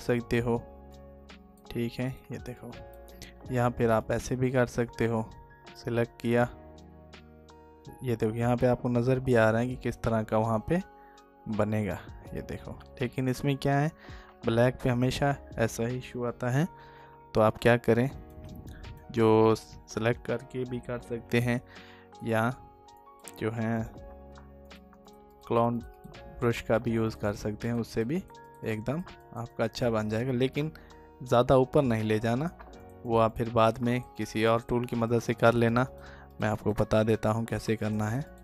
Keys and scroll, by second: 13.7 ctrl+z, 16.0 ctrl+d.